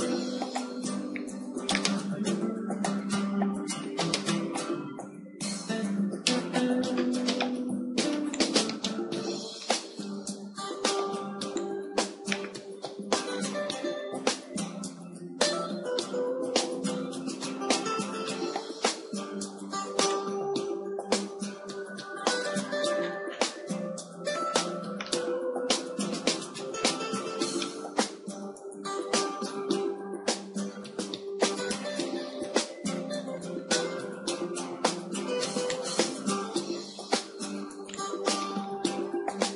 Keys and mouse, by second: 1.2-3.2 drag, 3.2 middle click, 4.8 KP_1, 6.0 KP_3, 6.9 click, 8.4-10.6 drag, 10.6 shift+d, 12.2-14.8 drag, 14.8 KP_7, 16.3 r, 21.4 click, 23.2-27.0 middle drag, 28.2-31.4 middle drag, 29.5 KP_3, 31.3 s, 35.8-38.0 drag, 37.4 g, 38.2-39.5 drag.